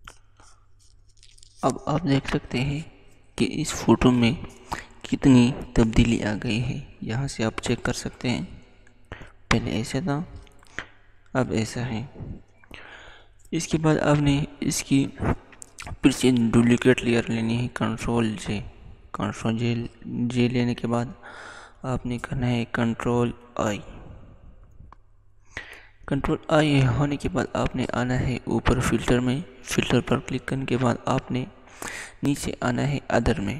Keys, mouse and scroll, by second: 6.5 click, 6.7 click, 9.2 click, 16.5 click, 17.0 ctrl+j, 22.4 ctrl+j, 23.2 ctrl+i, 28.2 ctrl+i, 28.4 click.